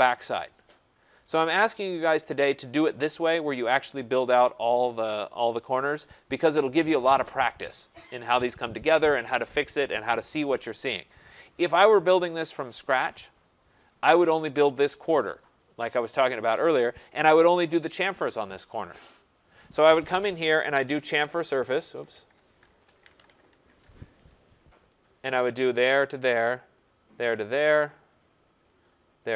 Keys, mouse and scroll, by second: 2.6 right click, 5.8-7.5 scroll, 11.2-11.8 scroll, 12.3 right click, 12.7-13.1 scroll, 13.7-15.2 scroll, 15.3-16.3 scroll, 16.5 scroll, 20.4-23.7 typing, 21.7 Escape, 25.2-26.0 typing.